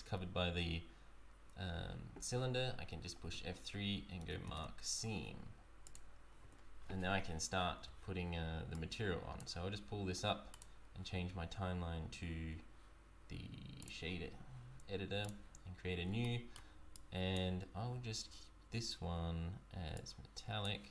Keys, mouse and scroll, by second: 0.1-1.2 scroll down 2, 3.2 F3, 6.4 Tab, 6.8-7.6 scroll down 2, 8.7 click, 10.5 click, 15.2 click, 15.8-16.2 scroll up 2, 16.2 shift+middle click, 16.9 click, 17.6-18.5 scroll up 6, 19.9 click.